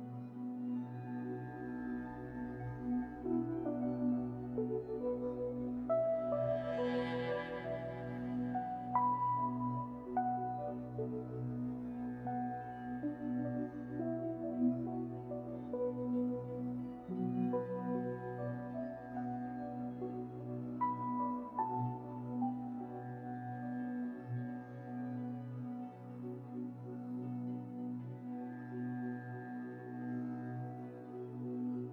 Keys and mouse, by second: 3.9 click, 4.2 g, 7.8 click, 8.1 g, 10.6 click, 10.9 g, 14.3 click, 14.6 g, 18.8 Tab, 21.4 click, 22.3 Tab, 23.0 Tab.